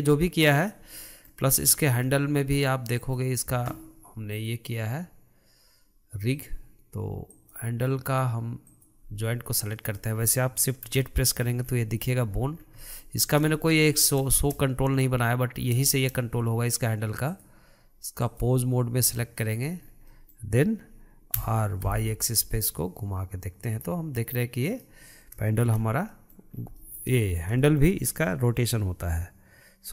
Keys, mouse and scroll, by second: 1.0-1.5 middle drag, 1.5 scroll up 3, 1.8-3.0 shift+middle drag, 3.0 click, 4.4-7.5 drag, 8.7-9.9 drag, 9.9-10.9 middle drag, 10.9 shift+z, 11.2-11.6 middle drag, 11.6-12.6 scroll up 3, 12.6 scroll down 3, 12.8-17.3 middle drag, 17.3-19.5 drag, 19.9 scroll down 3, 20.1-21.4 middle drag, 21.4 r, 25.8 shift+z, 26.1 middle click, 26.5 scroll up 2, 26.8-29.9 shift+middle drag.